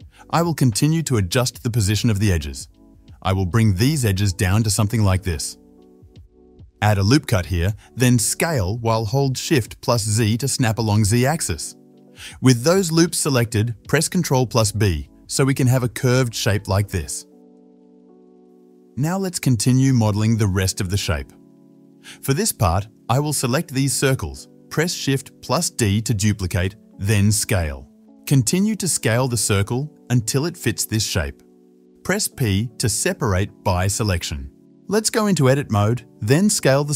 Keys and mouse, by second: 1.1 3, 1.3 alt+shift+click, 1.4 alt+shift+click, 2.8 g, 6.5 ctrl+r, 9.2 alt+s, 11.5-21.2 middle drag, 13.7 ctrl+alt+s, 14.0 ctrl+b, 21.2-22.6 drag, 21.5 KP_7, 22.6 middle click, 23.0 click, 23.1-24.6 alt+shift+middle drag, 24.6 alt+shift+click, 25.3 shift+d, 27.7 s, 29.4-34.2 shift+middle drag, 32.3 p, 33.7 Tab, 34.2 click, 34.4 Tab, 34.9 click, 35.1 a, 36.4 s.